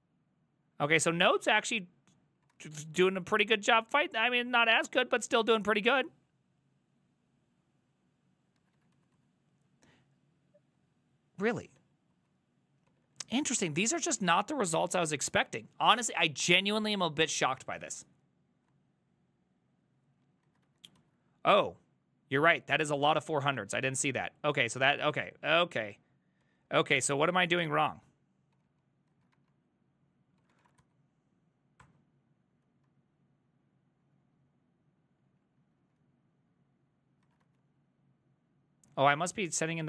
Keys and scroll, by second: 0.9 ctrl+a, 1.1 [, 1.3 ctrl+u, 2.6 shift+a, 8.6 ctrl+a, 8.8 [, 9.0 ctrl+u, 9.2 ctrl+u, 11.8 ctrl+d, 12.3 ctrl+u, 12.9 ctrl+d, 13.2 ctrl+d, 13.8 a, 20.5 ctrl+a, 20.7-24.9 typing, 21.0 ctrl+u, 24.7 ctrl+a, 25.0 ctrl+u, 25.2 ctrl+u, 25.5 ctrl+u, 26.5 ctrl+d, 26.6 ctrl+d, 26.8 ctrl+d, 26.9 ctrl+d, 27.1 ctrl+a, 27.3 3, 28.6 ctrl+c, 28.7 ctrl+c, 29.2 ctrl+a, 29.4-31.1 typing, 31.8 ctrl+h, 32.9-37.5 typing, 37.3 ctrl+a, 39.3 Up.